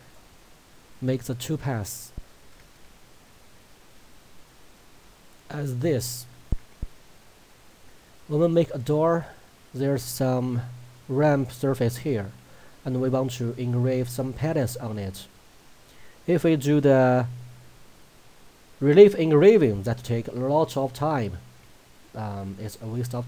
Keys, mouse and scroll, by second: 0.9 alt+scroll up 1, 1.7 alt+scroll down 1, 2.9-3.7 ctrl+scroll up 1, 5.3 click, 5.5-8.2 drag.